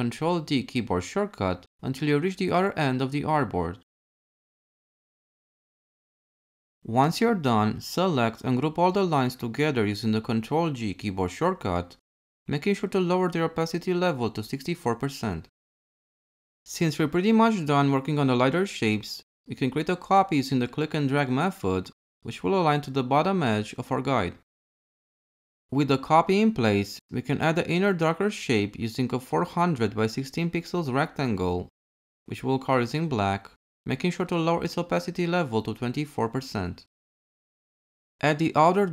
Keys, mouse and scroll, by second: 10.1 ctrl+g, 20.1 alt+shift+click, 25.9 m.